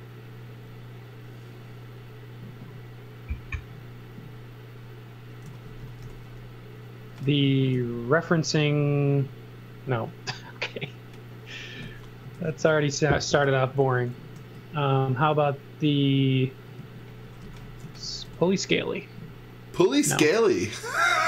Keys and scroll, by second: 5.2-7.8 typing, 12.3 super+z, 13.1 s, 16.5-19.2 typing.